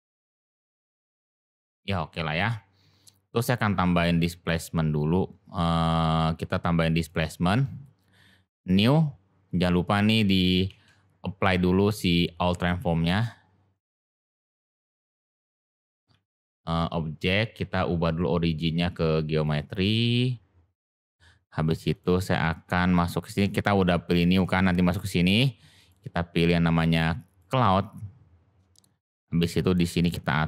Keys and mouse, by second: 5.3-7.0 drag, 9.4 click, 10.6 ctrl+a, 13.7 click, 16.2 ctrl+z, 17.1-19.4 drag, 21.0 click, 21.8 click, 25.8-27.3 drag, 29.9 click.